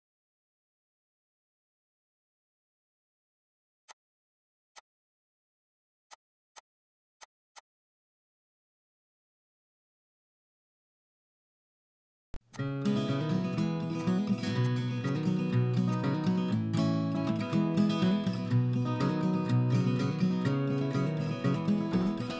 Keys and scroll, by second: 3.6 ctrl+a, 4.5 ctrl+h.